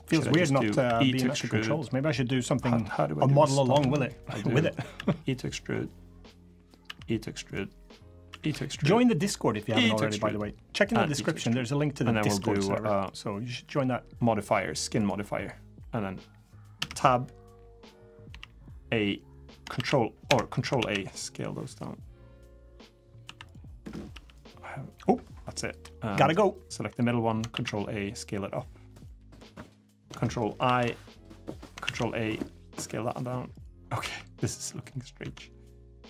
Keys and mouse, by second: 0.2 shift+middle click, 0.6 e, 3.6 ctrl+z, 3.9 click, 4.7 e, 6.4 click, 6.6 e, 7.9-9.3 drag, 9.2 e, 9.4 e, 10.5 click, 10.7 e, 12.2 Tab, 12.5 click, 13.6-14.8 drag, 16.6 Tab, 18.1 a, 19.5 shift+a, 20.6 ctrl+a, 23.0 1, 23.5 click, 23.9 g, 27.3 ctrl+a, 30.4 ctrl+i, 31.6 ctrl+a, 33.8 Tab, 35.0 Tab, 35.8-36.0 drag.